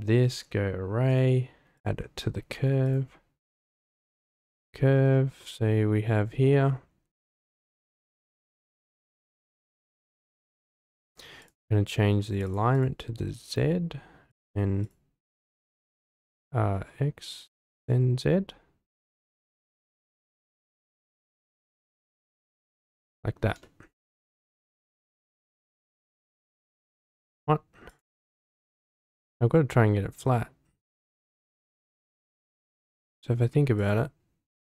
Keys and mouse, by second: 0.3 click, 1.1-1.8 drag, 2.8 click, 4.0 click, 5.4-6.3 middle drag, 10.6 click, 11.4-12.3 drag, 12.7 click, 14.8-16.1 drag, 17.3 click, 17.8 click, 19.5 click, 20.5 click, 21.8 click, 22.9-23.3 middle drag, 23.6-23.9 shift+middle drag, 26.2-27.3 drag, 28.6-29.8 middle drag, 30.2-30.9 middle drag, 32.2-32.5 shift+middle drag, 32.9-33.2 middle drag, 33.7 click.